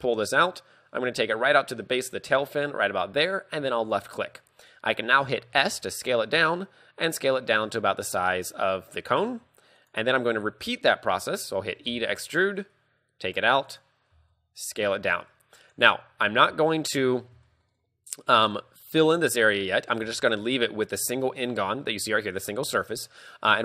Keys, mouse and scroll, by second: 16.7 shift+middle click, 17.0-17.4 scroll up 5, 17.5 shift+middle click, 19.8 middle click, 20.1 z, 20.4 middle click, 22.8 KP_3.